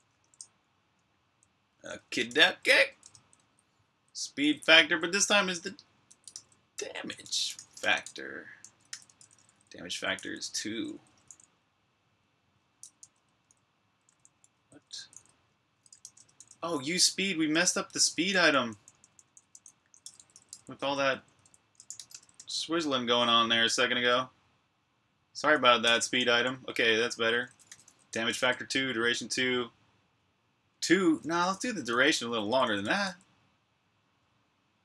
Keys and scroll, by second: 0.0-3.1 typing, 12.9-21.8 typing, 23.3 typing, 25.7-27.6 typing, 30.5-33.1 typing, 34.2 typing.